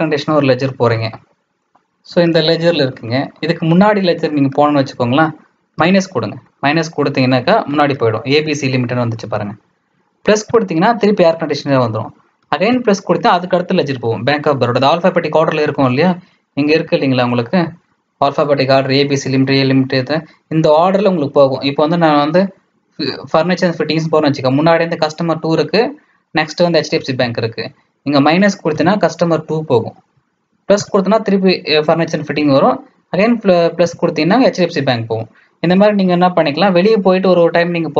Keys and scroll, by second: 0.6-1.4 typing, 5.7 -, 16.7 Escape, 27.2 Return, 28.7 -.